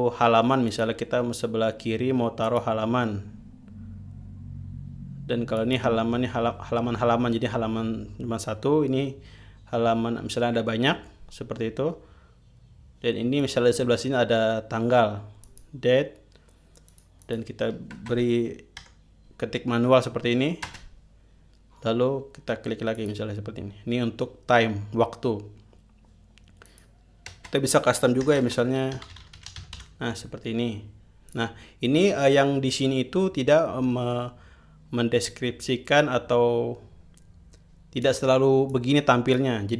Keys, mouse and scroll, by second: 1.2 click, 3.0 click, 6.1 click, 14.0 click, 16.0 click, 17.4 click, 18.6 space, 19.4 -, 21.2 space, 23.5 click, 27.2 click, 27.9-30.8 typing, 31.8 click, 38.6 click, 39.2 click.